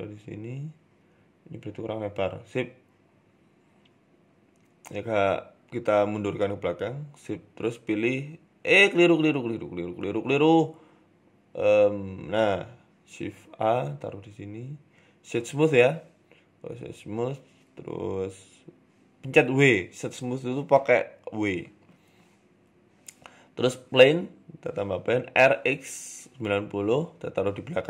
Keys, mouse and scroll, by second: 0.5 right click, 0.7 s, 2.2 middle click, 2.4 scroll down 5, 2.7 middle click, 3.4 Tab, 4.0 KP_7, 4.6 click, 5.4 g, 6.3-6.7 scroll up 3, 6.7 shift+a, 8.3 middle click, 8.8 Tab, 9.5 w, 10.7 ctrl+z, 11.1 ctrl+z, 11.5 Tab, 11.9 shift+a, 13.2 s, 14.0 w, 17.0 KP_7, 17.4 g, 18.2 middle click, 18.6 scroll down 1, 18.8 middle click, 19.0-19.8 scroll up 3, 19.3 shift+middle click, 19.8 KP_1, 20.8 shift+a, 25.5-26.1 scroll down 1, 25.5 r, 26.1 g, 27.3 s.